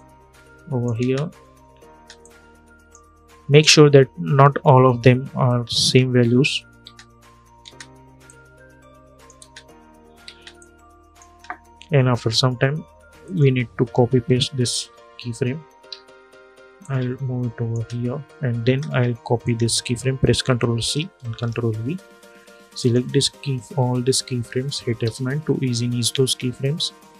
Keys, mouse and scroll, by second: 0.7 space, 1.9-6.5 drag, 6.5 space, 8.0 click, 9.1 space, 10.3 click, 11.0 space, 13.0 click, 14.3 ctrl+c, 14.7 ctrl+v, 15.6 ctrl+z, 16.5 click, 17.4 space, 19.1 click, 20.5 ctrl+c, 21.2 ctrl+v, 22.5 click, 24.7 F9.